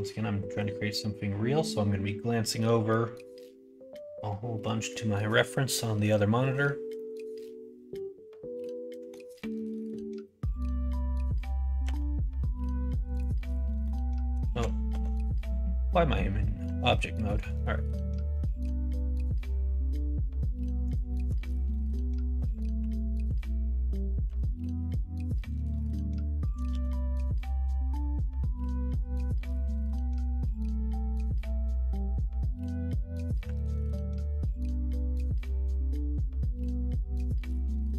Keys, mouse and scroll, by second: 5.8 middle click, 6.9-9.2 middle drag, 11.8 g, 13.8 middle click, 14.5 ctrl+z, 14.9 ctrl+z, 15.8 middle click, 16.6 Tab, 17.2 middle click, 18.6 g, 21.0 middle click, 21.6 middle click, 22.7 KP_1, 23.2 KP_3, 24.2 KP_1, 26.6 shift+d.